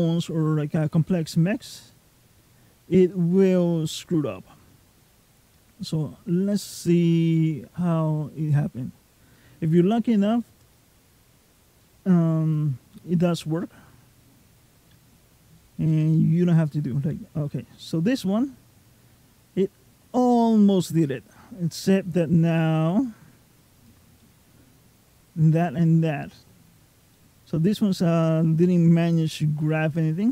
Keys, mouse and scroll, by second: 2.2 middle click, 7.0 click, 11.6 middle click, 15.7 g, 24.0 middle click, 26.9 middle click.